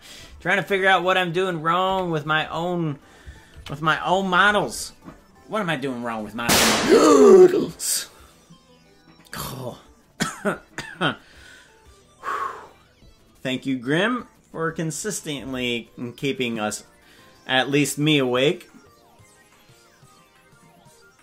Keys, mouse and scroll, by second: 1.8 KP_Decimal, 6.3 ctrl+s.